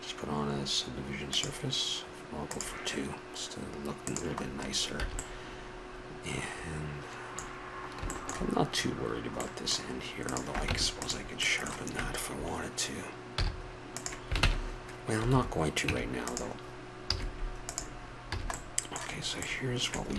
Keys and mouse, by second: 0.9 click, 2.5-5.3 drag, 5.0 a, 5.3-6.0 middle drag, 9.2 middle drag, 10.2-10.6 drag, 10.6 Tab, 11.4 click, 11.8 click, 13.0 middle click, 13.4 z, 14.4 ctrl+Tab, 15.9 Tab, 17.0 z, 18.0-19.9 middle drag, 18.3 a.